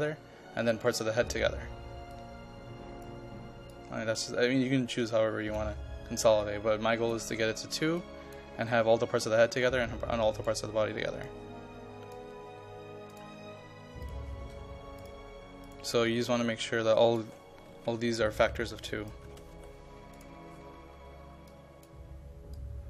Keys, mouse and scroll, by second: 17.7-19.6 typing, 18.9 click, 20.2-22.8 drag.